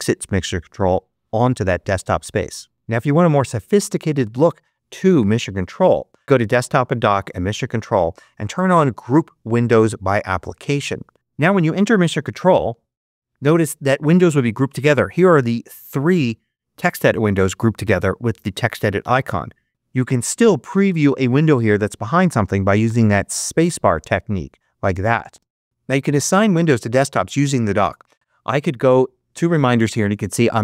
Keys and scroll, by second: 12.6 ctrl+Up, 19.7 ctrl+Left, 23.2 space.